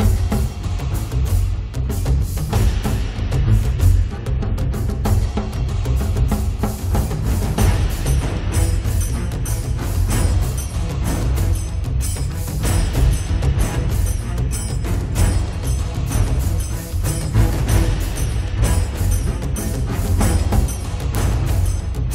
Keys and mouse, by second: 0.0 g, 1.2 click, 1.7-4.9 middle drag, 1.7 right click, 2.9 click, 5.2 click, 5.2 right click, 6.7 click, 6.7 right click, 7.6 1, 7.6 f, 8.1 click, 9.5 click, 9.5 middle click, 9.5 right click, 9.7 f, 9.9 click, 10.0 middle click, 10.0 right click, 11.8-14.2 drag, 14.4-16.1 drag, 16.2 click, 17.1-19.9 middle drag, 19.6 click, 20.1-22.0 middle drag, 20.1 right click, 21.1 right click, 22.0 click, 22.0 right click.